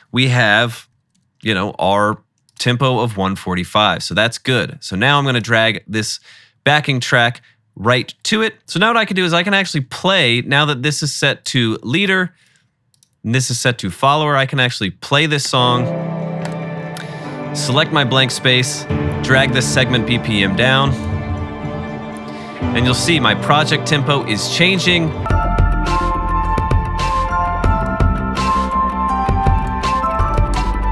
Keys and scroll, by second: 0.7-1.2 typing, 15.5 space, 29.8-30.9 typing.